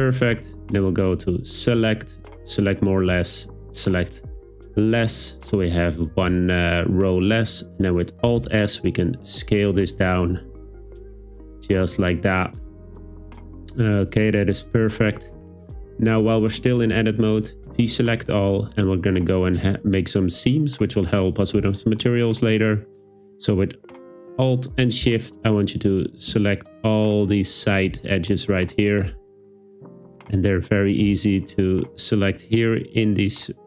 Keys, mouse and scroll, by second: 1.4-3.8 drag, 8.4 alt+s, 12.5 click, 25.9 alt+click, 28.3 alt+shift+click, 31.9 alt+shift+click.